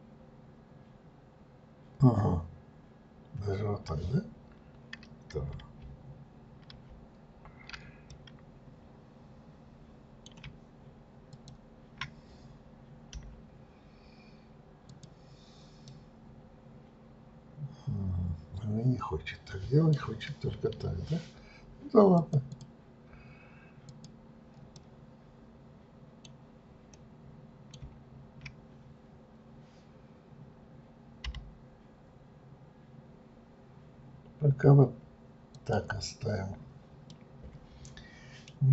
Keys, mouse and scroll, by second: 8.0-11.1 middle drag, 11.3 shift+click, 13.2 Delete, 15.9-18.9 middle drag, 22.2 click, 22.5 click, 23.9 click, 24.7-29.9 middle drag, 37.1-38.5 middle drag, 38.5-38.7 scroll down 1.